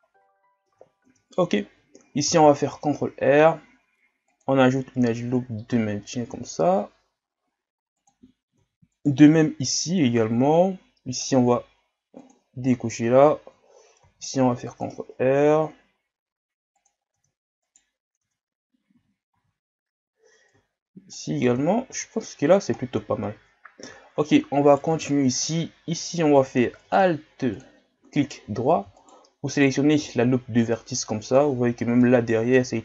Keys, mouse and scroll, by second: 0.7 Tab, 1.1 Tab, 2.3 ctrl+r, 8.6 Tab, 9.0 right click, 9.4 Tab, 12.2-14.0 drag, 14.0 ctrl+r, 17.1 Tab, 17.7 right click, 18.3 Tab, 19.0 a, 19.3 a, 20.5-21.5 drag, 21.5 Tab, 21.9 a, 22.2 scroll down 2, 22.8-23.2 scroll down 7, 23.2 scroll up 7, 24.0-24.3 shift+scroll down 1, 24.3-24.7 scroll up 1, 24.7 right click, 24.9 Tab, 26.8 ctrl+Tab, 28.2 alt+right click, 29.0 alt+right click, 29.5 alt+right click, 30.3 scroll down 2, 30.7-32.8 middle drag.